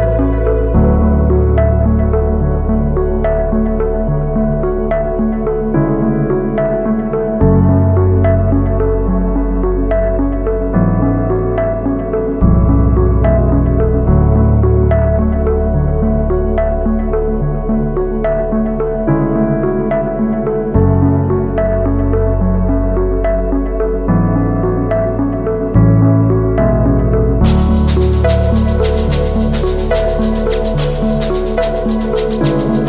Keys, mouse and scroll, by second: 2.3 Right, 2.5 Right, 3.3 Right, 3.5 Right, 3.6 Right, 4.9 Right, 5.4 Right, 6.1 Return, 6.7 Right, 8.4-8.8 scroll up 1, 9.4-9.8 scroll up 1, 11.5-12.0 ctrl+scroll down 1, 12.1-12.7 shift+scroll down 1, 13.6 space, 14.8-15.3 alt+scroll down 1, 15.5 space, 20.0 ctrl+click, 20.9 right click, 25.1 double click.